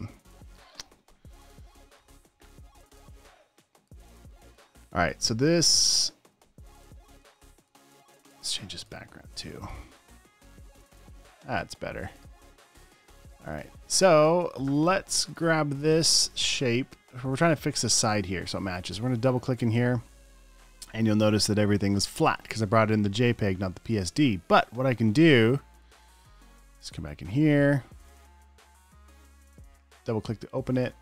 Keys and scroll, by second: 7.4 alt+super+space, 8.7 space, 11.0 alt+BackSpace, 11.1 v, 11.9 space, 12.3 space, 13.2 super+space, 13.8 space, 14.3 space, 14.5 space.